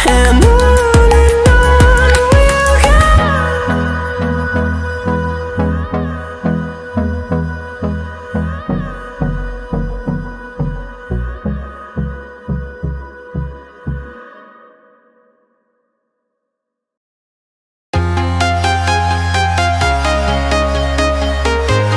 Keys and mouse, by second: 0.3 click, 3.3 g, 5.9 click, 7.0 shift+click, 8.4-10.1 drag, 12.4 click, 12.8 click, 13.6 click, 13.8 click, 15.4 click, 17.0-18.2 drag, 19.2 Tab, 21.1 click.